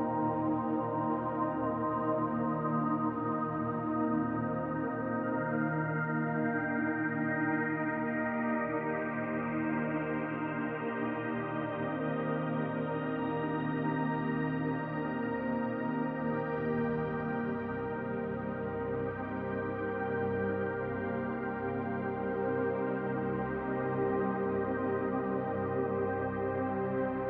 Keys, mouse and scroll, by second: 2.3 scroll down 2, 2.6-4.9 middle drag, 4.9 click, 5.3-7.4 middle drag, 7.4 click, 7.7 scroll down 2, 7.9-9.8 middle drag, 8.5-9.2 scroll up 2, 9.2-9.8 scroll up 1, 9.8 click, 10.2 scroll down 2, 10.4-12.5 middle drag, 11.0-11.9 scroll up 2, 11.9-12.5 scroll up 1, 12.5 click, 12.8 scroll down 2, 13.0-15.5 middle drag, 13.6-14.6 scroll up 2, 14.6-15.5 scroll up 1, 15.5 click, 15.9 scroll down 2, 16.0-18.3 middle drag, 16.6 scroll up 2, 18.3 click, 18.7 scroll down 1, 18.8-22.6 middle drag, 19.1 scroll up 1, 20.2 scroll up 1, 21.2-22.6 scroll up 1, 22.6 click, 22.9-24.6 middle drag, 24.6 click, 24.8 scroll down 1, 25.1-27.2 middle drag, 25.4-25.9 scroll up 1, 26.6-27.2 scroll up 1.